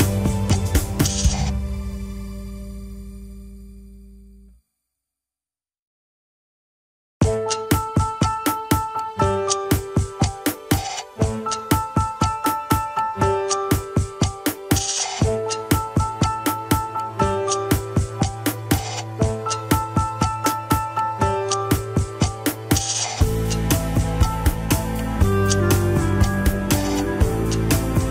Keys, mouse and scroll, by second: 0.0-1.1 scroll up 3, 1.1 click, 2.1 r, 4.4-5.0 middle drag, 5.0 scroll down 2, 5.5 a, 5.9 alt+r, 6.3 alt+g, 6.4 KP_3, 6.8 click, 7.8 r, 9.7 KP_1, 9.9 scroll down 3, 10.3 ctrl+Tab, 10.8 ctrl+s, 11.0 click, 12.1 scroll up 3, 12.3 shift+middle click, 12.8 scroll up 1, 13.5 alt+h, 15.3 click, 15.8-16.3 scroll up 2, 16.3 Tab, 16.8 alt+z, 17.2 click, 18.0 click, 18.5 click, 19.3 shift+click, 20.4 ctrl+l, 20.8 alt+z, 21.7 p, 22.6 Tab, 23.1 click, 24.1-24.4 shift+drag, 25.2 click, 26.0-26.4 shift+drag, 26.9-27.6 scroll down 8, 27.6-28.1 shift+middle drag.